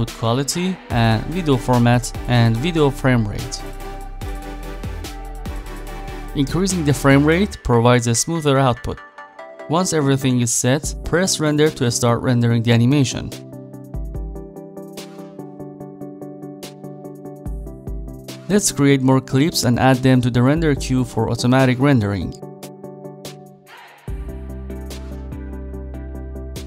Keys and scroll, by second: 19.5 s, 21.2 e.